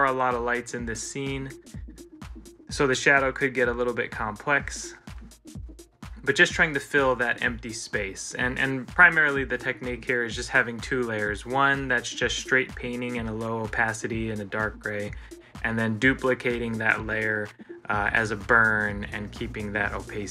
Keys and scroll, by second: 0.5 ctrl+z, 6.0 ctrl+z, 8.7 ctrl+z, 18.4 ctrl+z.